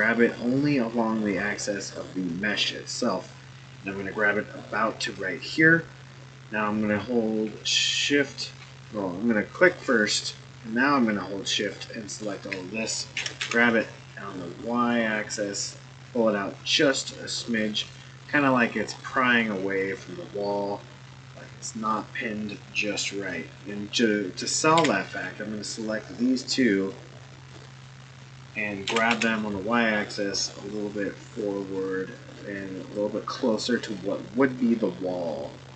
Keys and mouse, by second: 9.6 click, 11.6 shift+click, 12.1 shift+click, 13.1 g, 18.3-21.9 middle drag, 24.8 1, 25.8-27.5 drag, 28.8 g, 33.3-35.7 middle drag.